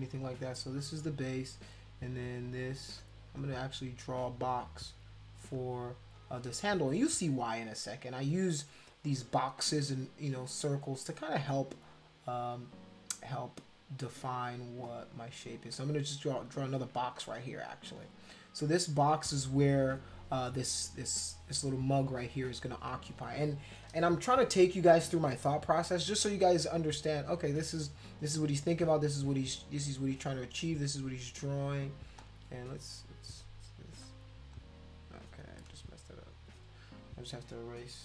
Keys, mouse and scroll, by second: 0.3 click, 2.1 click, 2.8 click, 3.4 shift+click, 3.9 shift+click, 4.1 shift+click, 4.3 shift+click, 5.5 shift+click, 6.1 shift+click, 12.2 click, 12.7 click, 14.9 click, 15.1 click, 15.5 click, 16.4 shift+click, 17.2 click, 18.0 shift+click, 18.7 shift+click, 32.2 click, 34.0 click, 34.5 click, 36.2 shift+click.